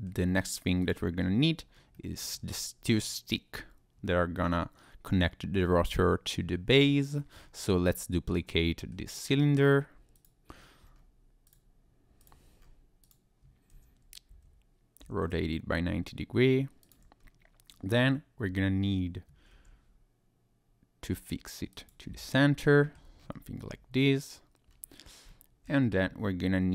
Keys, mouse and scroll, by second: 0.1 scroll down 2, 0.3 scroll up 1, 0.8 click, 1.2 scroll down 1, 1.7 scroll down 1, 1.9 middle click, 4.1 middle click, 6.8 middle click, 7.4-7.7 scroll up 2, 7.7 middle click, 10.1 click, 10.6 scroll down 2, 11.5 click, 12.2 click, 12.6-13.0 scroll up 1, 13.0 click, 13.7 shift+d, 14.3 Escape, 15.0 r, 16.8 ctrl+click, 17.2-18.3 scroll down 1, 18.4 f, 19.5 g, 21.7 click, 22.6 shift+middle click, 23.2-24.1 scroll up 2, 24.7 scroll down 1, 25.3 shift+middle click, 26.0 Tab.